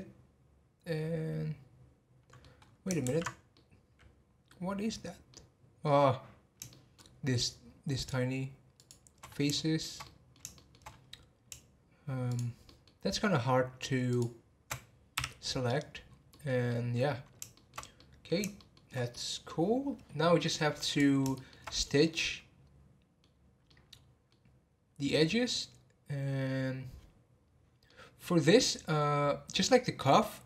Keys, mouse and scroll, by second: 2.6-3.0 scroll up 2, 3.0 ctrl+z, 3.5-4.7 middle drag, 4.7 scroll up 1, 5.3 middle click, 6.1 scroll up 2, 6.7-7.9 shift+middle drag, 7.9 shift+click, 8.7 shift+click, 9.2 scroll down 3, 9.5-10.9 shift+middle drag, 10.9-11.4 scroll up 3, 11.4 scroll up 1, 12.3 shift+click, 12.6-14.1 shift+middle drag, 14.1 shift+click, 15.2 h, 15.8-16.1 scroll down 7, 16.3-20.8 middle drag, 20.8 click, 21.3-26.7 shift+middle drag, 27.8-30.4 middle drag.